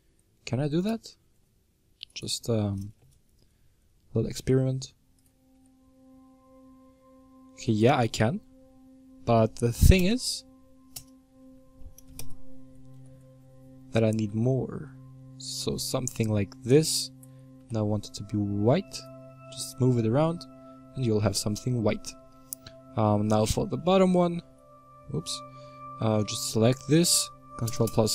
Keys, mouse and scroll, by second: 2.0 right click, 2.7 s, 5.5 g, 9.9 KP_Add, 10.8 KP_Add, 11.9 s, 14.0 middle click, 14.2 Tab, 14.8-16.8 middle drag, 16.8 Tab, 17.6 g, 19.2 Tab, 20.1-22.6 middle drag, 22.6 Tab, 23.0-24.6 middle drag, 24.6-25.2 scroll down 2, 25.2-26.5 middle drag, 26.5 right click, 27.6 KP_Add, 27.8 KP_Add.